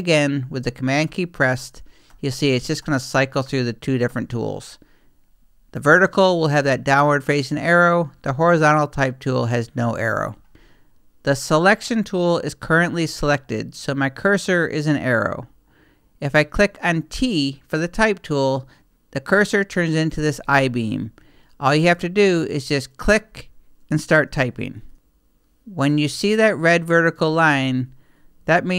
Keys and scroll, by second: 1.0 super+t, 8.1 super+t.